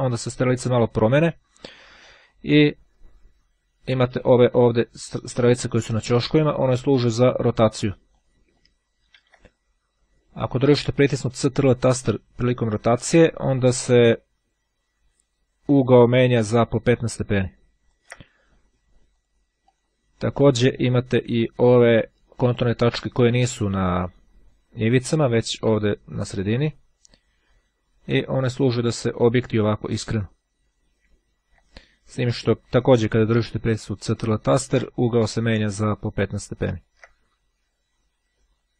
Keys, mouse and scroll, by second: 3.8-8.7 drag, 9.4 ctrl+z, 10.8-18.5 ctrl+drag, 19.0 click, 27.5-37.4 drag.